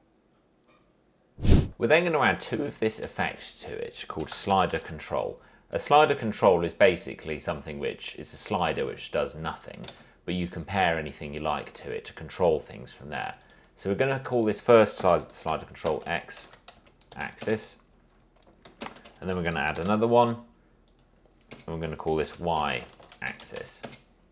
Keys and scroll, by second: 3.4 ctrl+space, 4.1-5.5 typing, 10.1 ctrl+z, 15.1 Return, 15.7-17.9 typing, 19.0 ctrl+space, 19.3-20.5 typing, 21.7 Return, 22.4-24.2 typing.